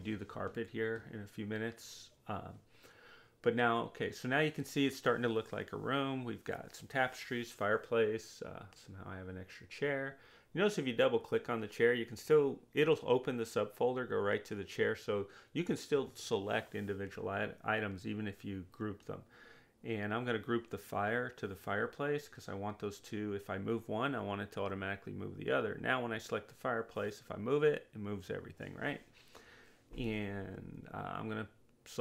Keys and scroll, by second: 12.6 Delete.